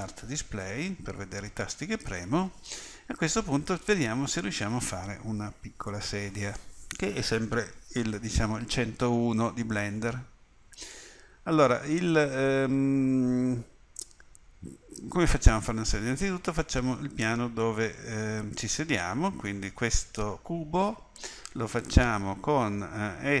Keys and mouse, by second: 10.0 middle click, 10.7-23.4 middle drag.